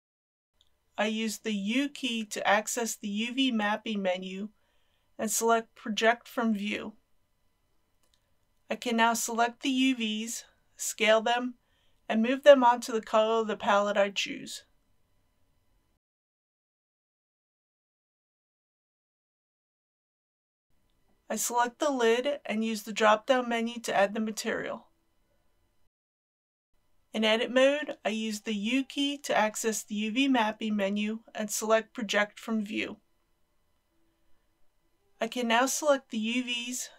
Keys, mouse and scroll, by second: 1.0 u, 5.5-9.2 drag, 9.9 s, 11.9 click, 12.5 g, 16.4 click, 17.4 Tab, 18.3 middle click, 19.4 KP_1, 21.9-23.0 drag, 26.7 scroll down 1, 26.9 Tab, 28.2 a, 30.2 u, 33.3-35.9 drag.